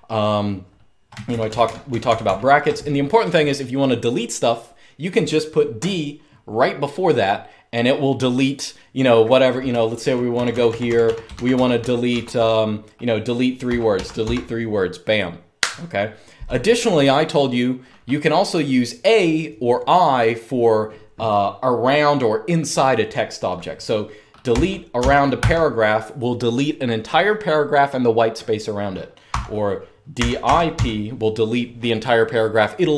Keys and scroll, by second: 1.0-1.9 typing, 9.4-12.3 typing, 13.3-13.9 typing, 23.9-25.6 typing, 29.0-30.9 typing.